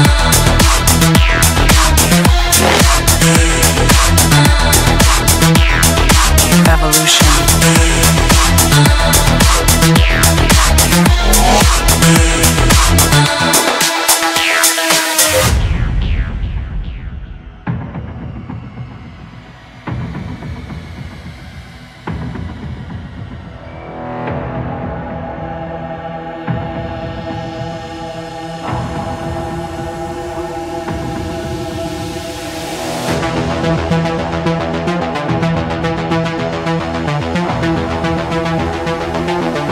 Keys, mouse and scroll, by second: 0.7-1.8 drag, 2.1-4.1 drag, 5.3-6.8 typing, 7.6 Return, 10.4 click, 12.0 click, 13.0 click, 13.7 click, 14.6 middle click, 17.6 middle click, 19.9 click, 21.2 click, 22.2-26.0 drag, 26.0-28.6 middle drag, 32.1 click, 34.4 middle click, 34.5-35.5 scroll, 36.6 click, 37.9 click, 38.7 click.